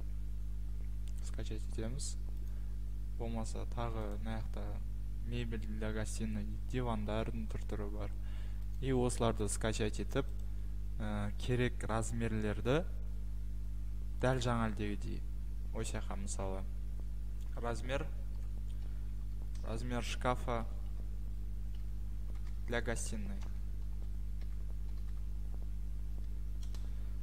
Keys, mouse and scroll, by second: 2.5 click, 4.1 scroll, 6.4 click, 6.4 middle click, 8.8 click, 14.1 scroll down 2, 14.3 click, 17.5-26.2 typing, 26.6 Home.